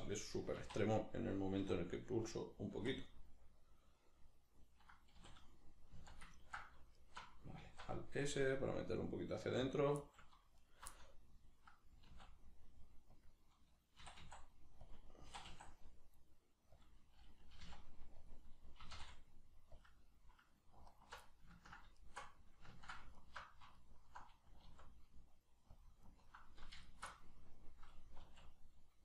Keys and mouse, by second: 1.3 click, 1.6 r, 2.2 click, 2.8 z, 3.1-7.0 middle drag, 5.2 a, 7.0 alt+right click, 7.6 alt+s, 9.8 click, 10.0 middle click, 10.6 alt+right click, 11.0-13.2 middle drag, 12.1 alt+s, 13.2 click, 14.0 e, 14.9 click, 15.3 e, 16.8 click, 17.6 g, 18.3 click, 18.8 e, 19.8 click, 20.9 alt+right click, 21.2 middle click, 22.0 alt+right click, 22.4 middle click, 23.2 alt+right click, 23.8 alt+right click, 24.6 alt+s, 25.8 click, 26.0 alt+right click, 26.8 alt+shift+right click, 27.1-28.2 middle drag, 28.2 alt+s.